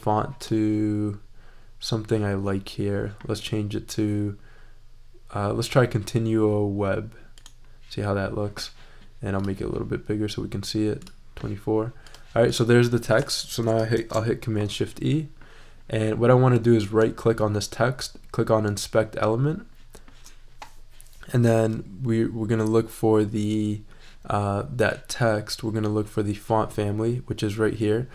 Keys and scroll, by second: 13.9 shift+super+e.